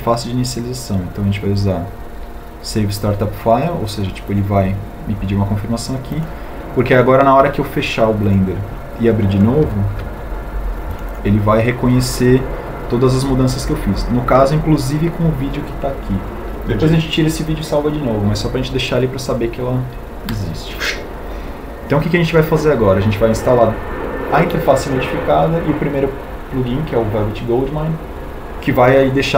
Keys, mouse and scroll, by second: 1.9 ctrl+u.